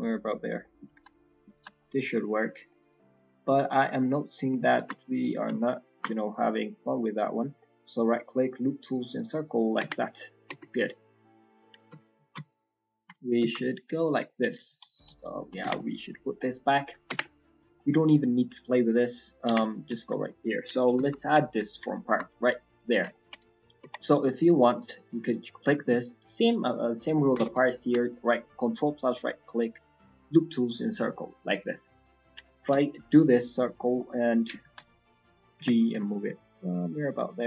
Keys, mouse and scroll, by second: 0.3 scroll down 1, 0.5 middle click, 0.9 ctrl+z, 1.1 middle click, 1.5 ctrl+z, 1.7 middle click, 2.0-3.3 scroll up 6, 2.5 click, 2.8 middle click, 3.4 shift+middle click, 3.8 click, 4.7 alt+shift+click, 5.1 middle click, 6.1 scroll down 4, 6.3 middle click, 7.2-7.6 scroll up 2, 7.5 middle click, 7.8 right click, 7.9 right click, 9.5 scroll, 9.7 Tab, 9.9 scroll down 4, 10.1 middle click, 10.5 Tab, 10.6 middle click, 11.4-11.9 scroll down 2, 11.7 KP_1, 12.3 KP_3, 12.9 KP_1, 13.4 KP_3, 13.7-14.4 scroll up 1, 14.4 scroll up 1, 14.5 ctrl+z, 15.6 Tab, 15.7 middle click, 16.3 middle click, 16.8 shift+middle click, 17.1 Tab, 17.2 middle click, 17.2 ctrl+z, 17.7 middle click, 19.1 scroll down 1, 19.4 Tab, 19.6 scroll down 6, 19.9 shift+middle click, 20.2 middle click, 20.7 KP_1, 20.9 KP_3, 21.2 KP_1, 21.5-22.5 scroll up 6, 22.0 shift+middle click, 23.1 shift+middle click, 23.5 scroll up 2, 23.8 Tab, 24.2-24.5 scroll up 2, 24.5 middle click, 25.2 click, 25.6 middle click, 27.3 ctrl+KP_Add, 29.1 right click, 29.2 right click, 31.8 scroll up 2, 32.0-32.3 scroll down 3, 32.5 KP_1, 33.2-34.0 scroll up 2, 34.0 f, 34.6 ctrl+z, 35.5 g.